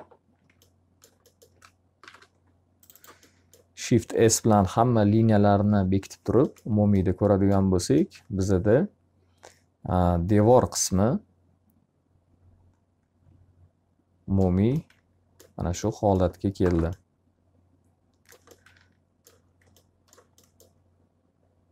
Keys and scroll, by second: 1.6 shift+s, 4.9 F3, 5.4 F4.